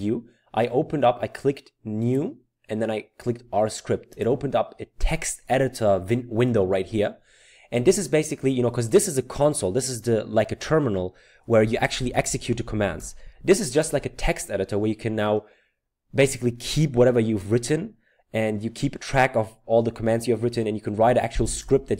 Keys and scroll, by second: 12.3 typing, 21.6 Return.